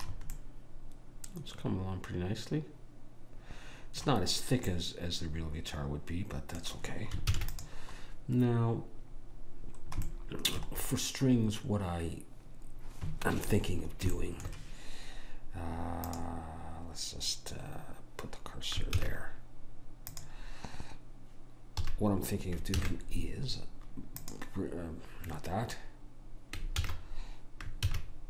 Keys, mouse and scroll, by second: 2.0 middle click, 4.8-7.4 middle drag, 7.4 ctrl+s, 11.0-12.6 middle drag, 12.6-14.2 scroll up 1, 14.2-16.2 middle drag, 16.2 click, 19.1 shift+s, 22.0 a, 22.8 shift+a, 26.9 ctrl+z, 27.9 shift+a.